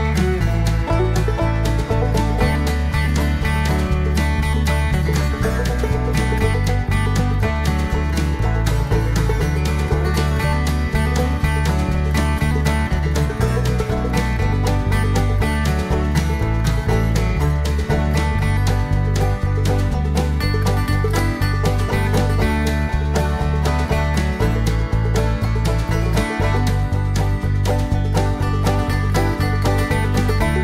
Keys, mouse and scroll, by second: 0.0-0.2 typing, 1.2-4.5 typing, 6.6 click, 9.3 click, 11.3 click, 12.6 click, 19.0-19.4 scroll down 2, 19.6 scroll up 2, 20.8 click, 22.1 click, 23.0 click, 25.3 click, 27.2 click, 29.0 click, 30.0 click.